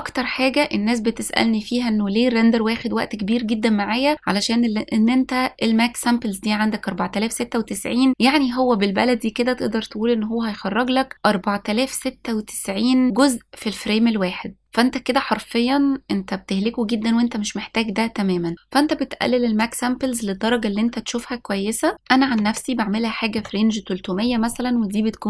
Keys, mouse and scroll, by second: 19.6-23.3 drag, 22.4 KP_0.